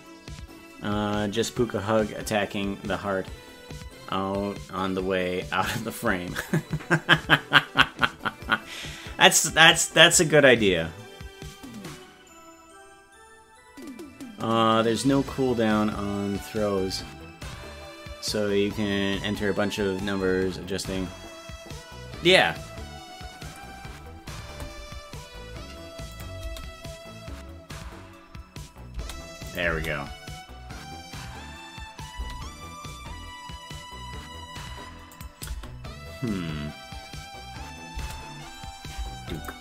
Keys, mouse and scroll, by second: 26.2 click, 26.4 space, 29.5 click, 29.5 space, 29.7 space, 35.1 click, 35.5 space, 39.4 click.